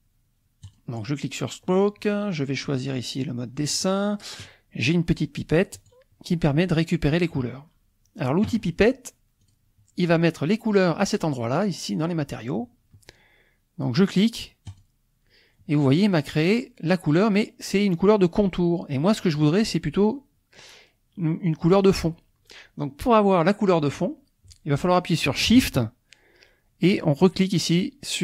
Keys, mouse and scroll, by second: 0.6 click, 2.6 click, 3.7 click, 5.7 click, 9.4 click, 14.7 click.